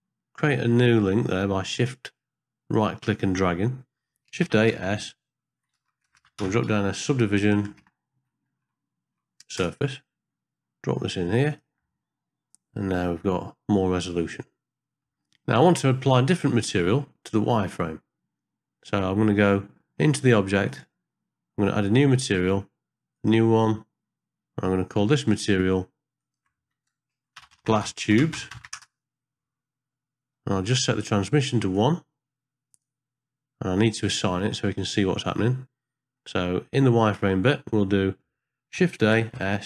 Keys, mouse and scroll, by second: 1.1 middle click, 1.4 scroll up 1, 2.0-2.8 drag, 4.7 shift+a, 6.2 BackSpace, 7.6 BackSpace, 13.6 middle click, 14.3 ctrl+middle click, 15.1 ctrl+middle click, 15.2 scroll up 1, 15.7 shift+middle click, 16.1 scroll up 1, 16.5 middle click, 20.7 click, 22.2 click, 23.2 click, 25.1 middle click, 25.5 scroll up 1, 26.2-28.8 drag, 30.6 middle click, 31.0 scroll up 1, 31.7-32.8 drag, 33.8 middle click, 34.1-35.0 scroll up 1, 35.0 middle click, 35.3-35.6 scroll up 1, 36.2 middle click, 36.7 scroll up 1, 37.8 middle click, 39.0 shift+a.